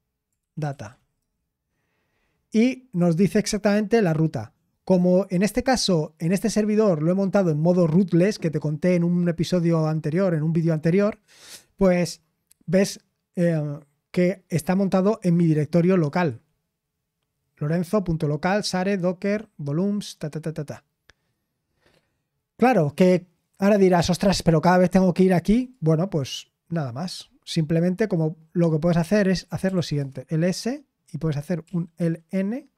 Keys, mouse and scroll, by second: 0.0-1.5 typing, 29.4-30.2 typing, 31.6-32.0 typing.